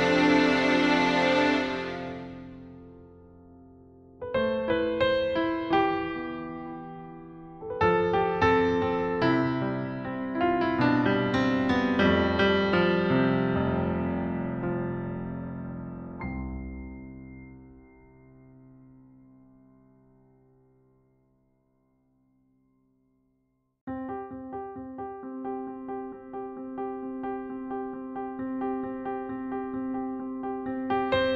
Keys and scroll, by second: 17.8-19.1 typing, 22.7 b, 24.9-26.8 typing.